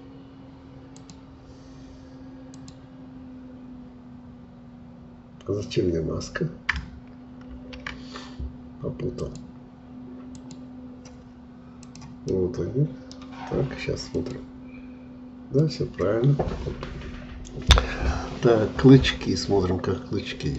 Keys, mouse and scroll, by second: 7.5 ctrl+z, 9.1-11.2 drag, 11.2-11.8 scroll down 1, 11.8 click, 12.2-15.7 middle drag.